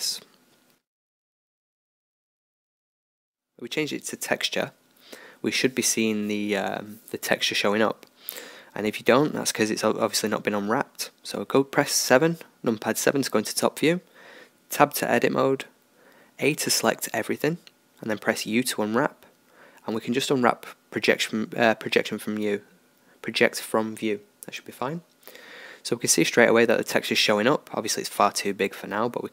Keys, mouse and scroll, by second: 0.3-3.8 drag, 4.8-7.5 middle drag, 7.5 middle click, 8.7 middle click, 9.3 KP_7, 10.2-11.3 middle drag, 11.5 middle click, 14.0 Tab, 14.0-15.7 middle drag, 15.7 a, 18.6 u, 21.0-23.0 drag, 23.6 Tab, 24.2-28.1 middle drag, 28.6 click, 28.9-29.3 middle drag.